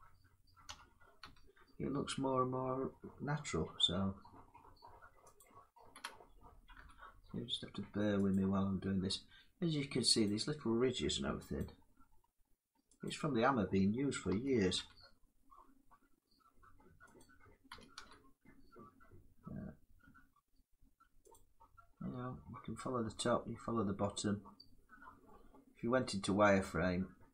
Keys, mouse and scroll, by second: 0.3 s, 0.9 y, 5.0 click, 5.6 g, 6.4 g, 8.0 click, 9.9 click, 11.3 alt+click, 12.7 click, 13.9 s, 14.4 y, 16.9 click, 17.4 g, 21.0 click, 22.8-24.9 drag, 24.9-27.3 middle drag.